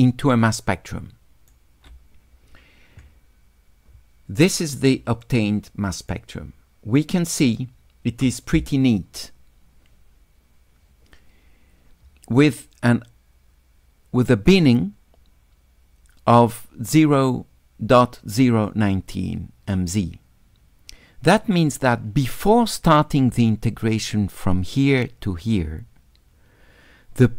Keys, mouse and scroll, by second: 5.2 shift+click, 7.0 shift+click.